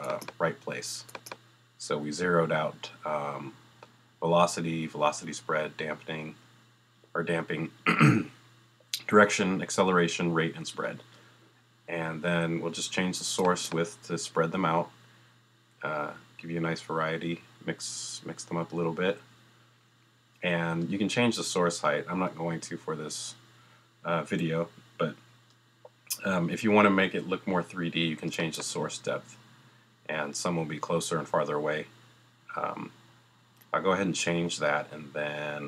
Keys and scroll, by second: 0.7 0, 1.9 0.